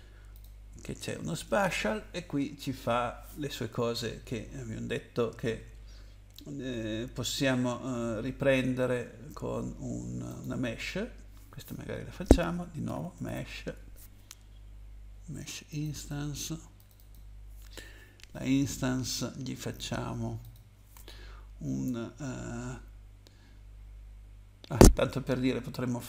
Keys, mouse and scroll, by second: 0.3 click, 10.3 click, 12.6-13.7 typing, 15.7 click, 15.9 click, 16.7 click, 16.9 click, 20.4 click.